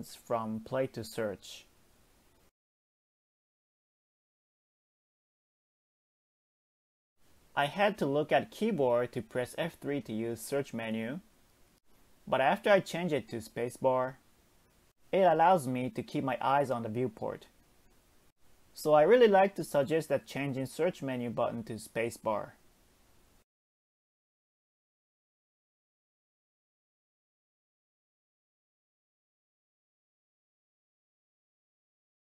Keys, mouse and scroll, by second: 9.4 space, 11.4 space, 12.2 space, 13.9 Tab, 14.5-15.4 scroll up 1, 15.4 ctrl+r, 16.6-18.1 middle drag, 19.1 alt+z, 19.5 click, 20.4 x, 21.8-22.7 middle drag, 22.7 Tab, 23.2 scroll down 1, 23.5-23.9 middle drag, 23.9 Tab, 24.4 middle click, 24.6 a, 25.7 space, 28.1 m, 30.1-32.3 drag.